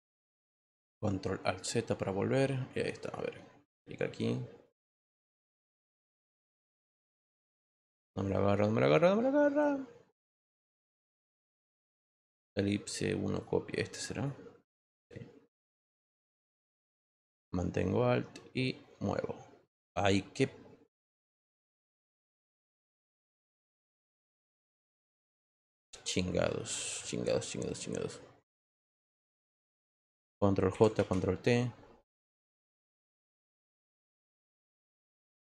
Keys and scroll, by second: 30.7 ctrl+j, 30.9 ctrl+t.